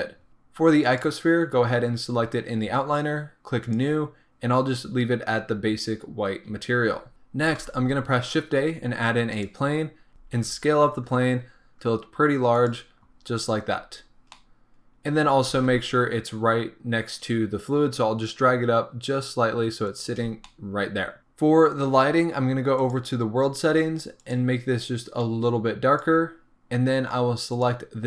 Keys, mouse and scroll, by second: 0.3-0.8 scroll down 1, 1.0 click, 3.8-7.1 drag, 6.8 scroll up 1, 7.1-10.1 middle drag, 9.5 shift+a, 9.8-10.1 scroll down 2, 10.1 ctrl+z, 10.4 s, 13.3-13.8 scroll down 2, 13.8 scroll up 1, 14.3-20.3 middle drag, 15.6 g, 20.3 scroll down 2, 20.4-25.2 middle drag, 21.2-25.2 scroll up 2, 25.2 click, 26.7-27.7 scroll down 1, 27.7 click.